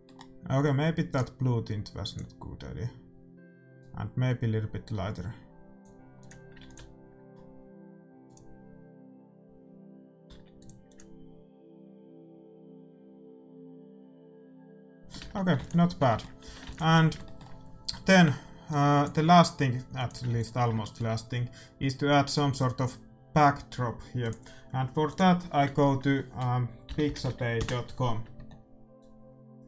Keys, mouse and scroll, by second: 1.1-2.9 drag, 6.3-8.3 drag, 6.6 ctrl+s, 8.8-10.5 drag, 10.5 ctrl+s, 11.6-13.3 drag, 15.1 middle click, 15.3 shift+z, 15.5 ctrl+s, 16.2-23.4 middle drag, 16.4 a, 16.6 ctrl+s, 18.7-21.8 drag, 20.2 ctrl+s.